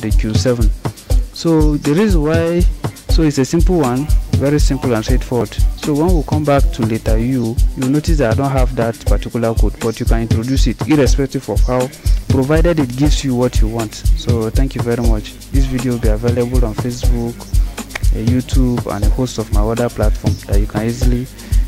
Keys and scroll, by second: 7.0 u.